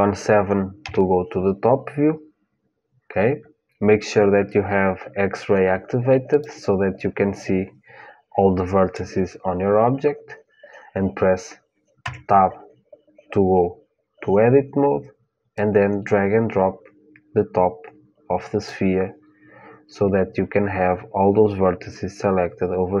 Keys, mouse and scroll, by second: 0.5 KP_7, 1.4-3.5 middle drag, 6.0-9.4 drag, 11.8 Tab, 15.3-18.4 drag.